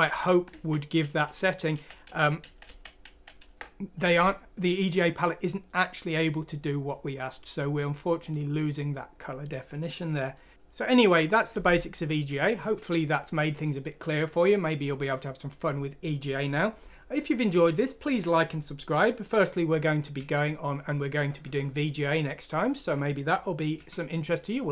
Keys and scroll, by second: 1.0 ctrl+z, 1.2 ctrl+z, 1.7 ctrl+z, 2.0 ctrl+z, 2.4 ctrl+z, 2.6 ctrl+z, 3.0 ctrl+z.